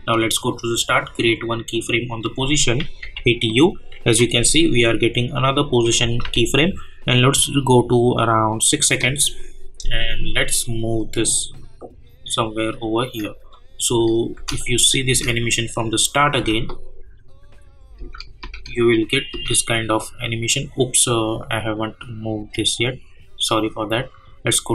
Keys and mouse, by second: 3.0 u, 5.8 -, 6.2 -, 8.6-13.5 drag, 13.8 space, 14.7 click, 15.0 space, 19.3 space, 20.1-24.7 drag.